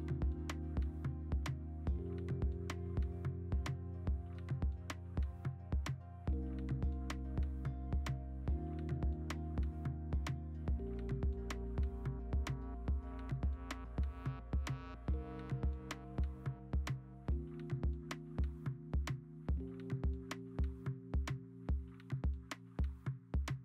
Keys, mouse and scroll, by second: 2.1 ctrl+z, 8.0 ctrl+j.